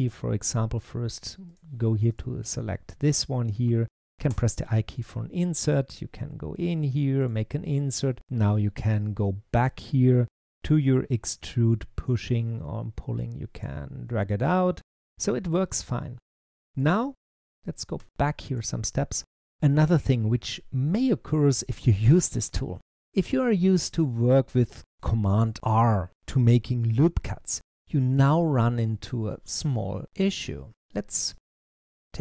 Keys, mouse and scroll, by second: 1.3 click, 2.6-4.2 middle drag, 10.2-12.1 drag, 13.9-17.0 middle drag, 17.5 z, 17.8 z, 19.0 click, 19.6-22.7 middle drag, 32.1-32.2 drag.